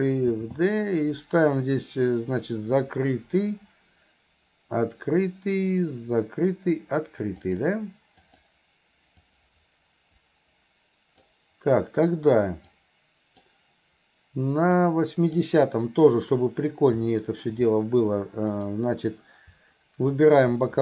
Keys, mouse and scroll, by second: 8.3 click, 9.3-11.4 drag, 12.8 click, 14.9 click, 17.2-17.5 middle drag, 18.5 click, 20.2 click.